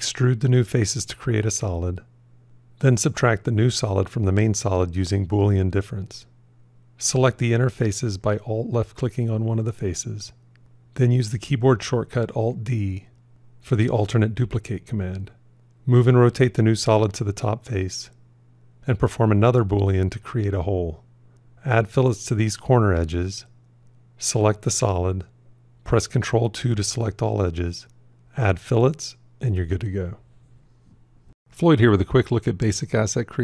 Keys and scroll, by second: 4.0 q, 10.9 alt+d, 19.9 q, 25.3 ctrl+2.